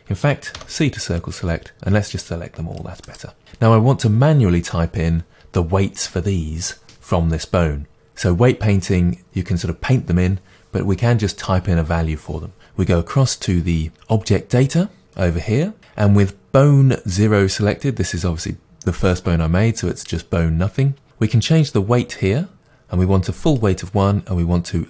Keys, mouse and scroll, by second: 0.6 c, 3.1 right click, 15.0 click, 21.7-24.8 drag.